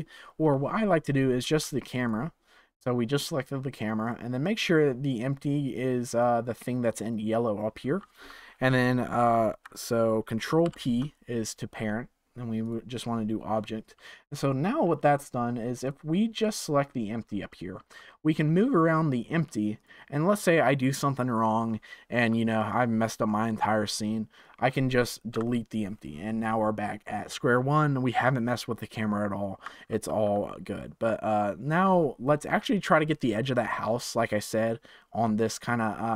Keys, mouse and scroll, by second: 2.0 ctrl+click, 4.0 ctrl+click, 10.6 ctrl+p, 15.8 click, 16.3 click, 16.8 click, 17.7 g, 22.1 r, 25.3 Delete, 29.8 ctrl+z, 35.7-36.1 shift+middle drag.